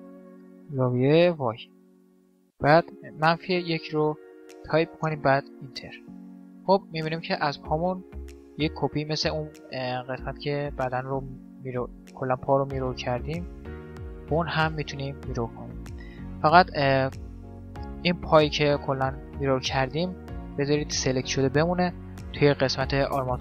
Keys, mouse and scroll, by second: 5.6-18.5 middle drag.